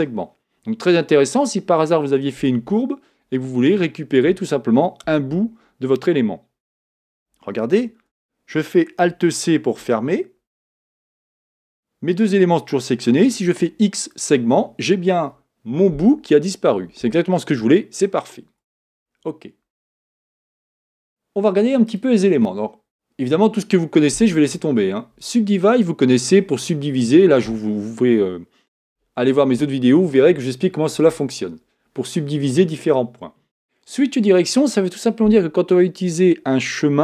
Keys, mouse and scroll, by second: 7.8 z, 9.8 alt+c, 13.5 x, 18.7 Tab, 20.6 Tab.